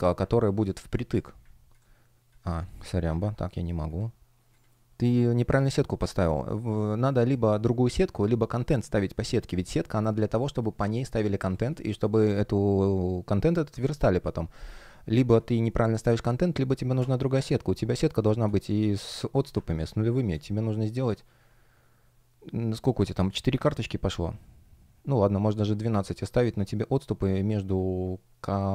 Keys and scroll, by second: 0.6 space, 3.1 super+\, 10.1 space, 11.4 space, 15.6 shift+o, 17.9 space, 19.8 space.